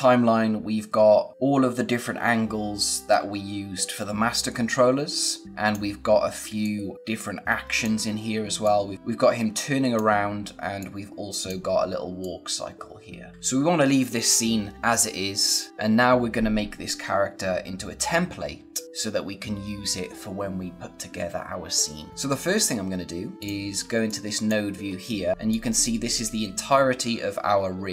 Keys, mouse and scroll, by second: 23.3 click, 23.8 space, 24.0 click, 24.3 space, 24.8-25.2 scroll up 1, 25.2 scroll down 1, 25.3 click.